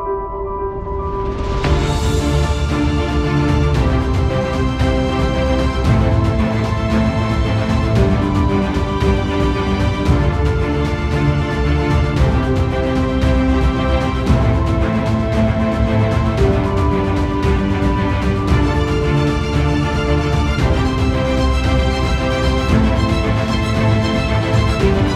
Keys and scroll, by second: 8.4 ctrl+v.